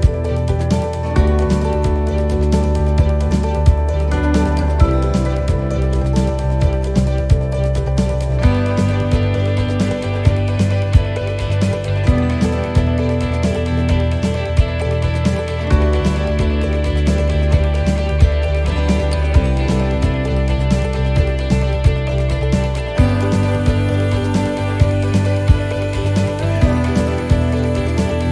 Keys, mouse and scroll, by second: 0.5-0.8 scroll up 2, 1.0 middle click, 1.3-1.9 scroll down 5, 1.9 middle click, 3.0 click, 8.5-8.9 scroll up 1, 9.0 middle click, 9.3-9.7 scroll up 2, 10.3 click, 12.1 right click, 12.9 shift+right click, 13.7 right click, 14.9 shift+right click, 16.3 x, 20.0 shift+right click, 20.6 x, 22.0 middle click, 22.7-23.1 scroll down 2, 23.1 middle click, 25.1-25.8 scroll down 4, 25.8 middle click, 27.3-27.8 scroll down 2, 27.8 middle click.